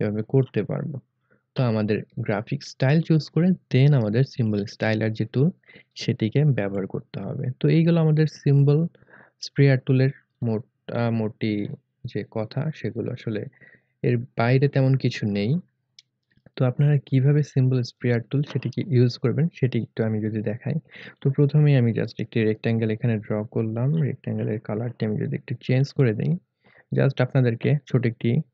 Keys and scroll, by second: 15.3 Delete.